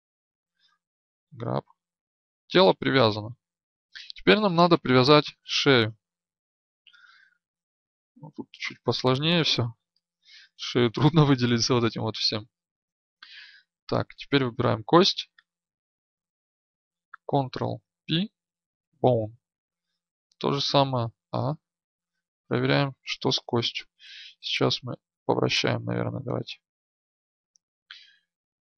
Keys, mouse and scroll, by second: 1.3 g, 4.9-16.0 middle drag, 9.0 right click, 14.4 right click, 17.8 ctrl+p, 20.1-23.3 right drag, 21.1 a, 25.3-28.7 drag.